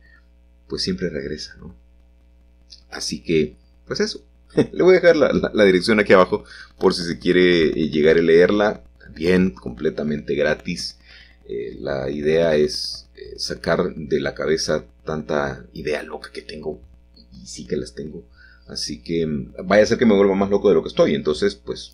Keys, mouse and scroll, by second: 0.4 shift+a, 2.1-3.1 drag, 3.1-4.8 scroll down 1, 4.8-5.9 scroll down 1, 6.4 g, 7.0 shift+z, 8.4-9.6 drag, 12.7 s, 12.9 x, 16.6 click, 17.6 s, 18.1 y, 19.3-20.3 drag, 20.3-20.8 typing.